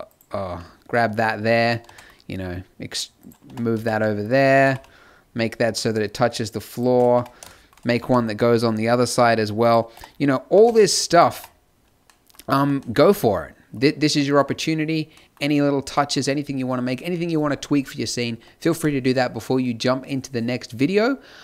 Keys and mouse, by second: 0.4 z, 1.8 shift+d, 3.4 Tab, 3.7 z, 4.4 z, 4.6 g, 7.1 Tab, 8.0 alt+d, 9.9 Tab, 10.5 g, 11.3 Tab, 12.5 a.